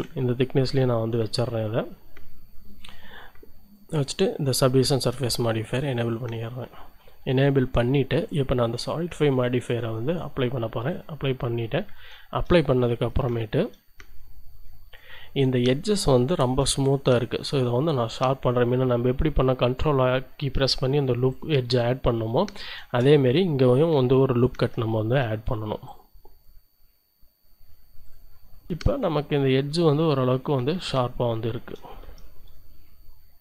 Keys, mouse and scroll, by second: 0.0 Return, 2.8 click, 4.9 click, 5.0-6.0 middle drag, 10.9 click, 12.0-13.0 shift+drag, 13.0 shift+Tab, 13.3 shift+click, 14.1 shift+scroll up 2, 14.2 shift+click, 14.8 scroll up 2, 16.4 ctrl+r, 16.8 ctrl+click, 21.3 click, 21.9-23.1 drag, 23.1-23.4 shift+scroll up 1, 24.5 ctrl+r, 25.8 click, 28.0 click, 28.2-28.7 scroll down 1, 28.7 Tab, 28.9 shift+click, 29.1-29.9 shift+scroll up 2, 30.1 shift+click, 30.6 shift+scroll up 1, 31.3 shift+click, 31.8 shift+middle click, 32.0 shift+Tab.